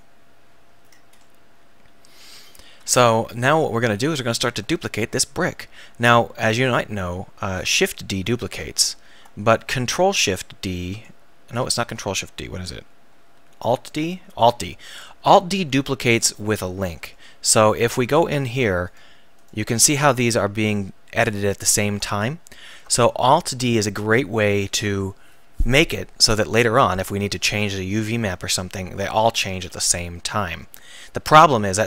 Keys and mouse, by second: 0.0 ctrl+shift+s, 0.0-3.0 drag, 3.0 Tab, 6.9 ctrl+d, 7.7 shift+d, 8.5-10.2 right drag, 9.0 ctrl+z, 10.0 ctrl+shift+d, 12.2 ctrl+z, 13.9 alt+d, 16.5-17.3 drag, 17.4 right drag, 18.1 Tab, 18.3 click, 20.9 click, 21.8 ctrl+z, 22.7 Tab.